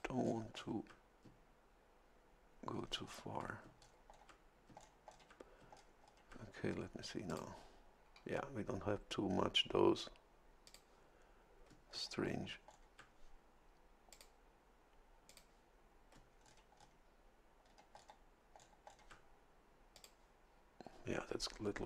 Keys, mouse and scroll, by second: 0.2 ctrl+scroll down 2, 2.7 ctrl+scroll down 2, 3.8-4.3 ctrl+scroll down 4, 4.8 ctrl+scroll down 2, 5.7-6.5 ctrl+scroll down 4, 7.3 click, 10.6 click, 11.9-12.9 ctrl+scroll down 6, 14.1 click, 15.3 click, 16.4-17.0 ctrl+scroll down 4, 17.6-17.9 ctrl+scroll down 2, 18.6 ctrl+scroll down 2, 19.9 click.